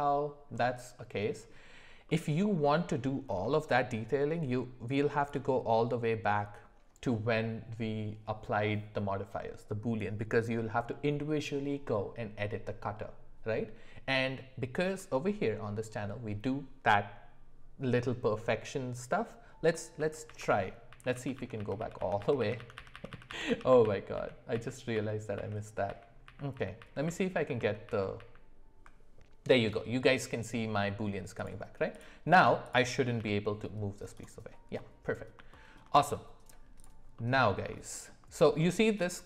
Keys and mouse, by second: 0.9-1.5 middle drag, 2.0 middle click, 2.6 middle click, 15.0 middle click, 20.0 ctrl+z, 20.3 ctrl+z, 20.5 ctrl+z, 20.9 ctrl+z, 21.1 ctrl+z, 21.3 ctrl+z, 21.6 ctrl+z, 21.8 ctrl+z, 22.2 ctrl+z, 22.4 ctrl+z, 22.6 ctrl+z, 22.8 ctrl+z, 22.9 ctrl+z, 23.1 ctrl+z, 23.3 ctrl+z, 23.5 ctrl+z, 23.7 ctrl+z, 24.2 ctrl+z, 24.5 ctrl+z, 24.9 ctrl+z, 25.9 ctrl+z, 26.2 ctrl+z, 26.5 ctrl+z, 26.8 ctrl+z, 27.0 ctrl+z, 27.3 ctrl+z, 27.6 ctrl+z, 27.8 ctrl+z, 28.2 ctrl+z, 31.4 click, 31.9 click, 33.2 g, 34.8-35.3 middle drag, 35.5 shift+middle click, 37.2 middle click, 37.9 shift+middle click.